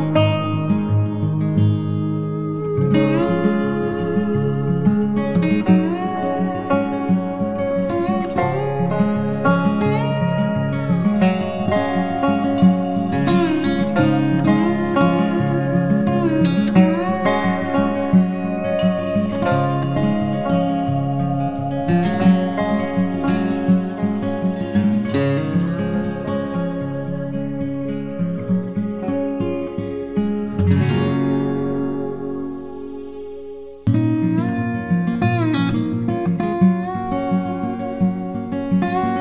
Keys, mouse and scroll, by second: 1.0 double click, 4.0-4.4 typing, 7.3 double click, 7.9 typing, 9.4 typing, 10.4 double click, 10.6 typing, 12.8 typing, 15.7 typing.